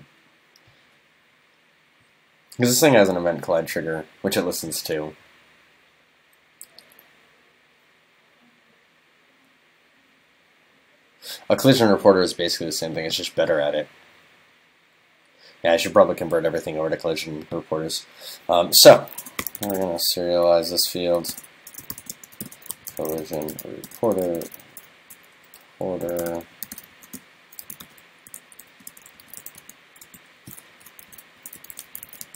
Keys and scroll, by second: 21.1 super+Right, 30.8 alt+shift+Left.